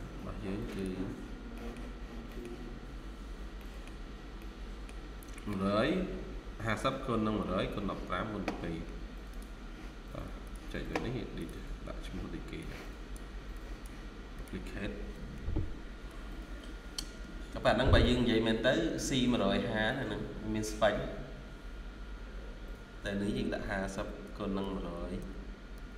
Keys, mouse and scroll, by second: 1.2 scroll down 1, 1.4 middle click, 3.0 scroll up 1, 3.5 middle click, 4.1 scroll up 1, 4.3 middle click, 23.8-25.9 typing.